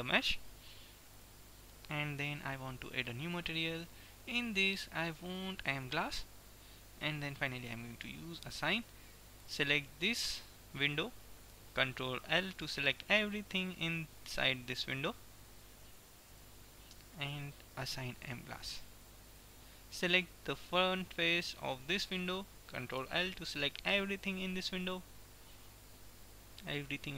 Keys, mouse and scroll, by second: 3.1-6.2 drag, 6.6-9.2 drag, 9.6-11.1 middle drag, 11.1 right click, 12.2 ctrl+l, 14.7-16.6 drag, 18.1-20.7 drag, 19.6-20.7 middle drag, 20.7 right click, 23.1 ctrl+l, 25.6-27.1 drag.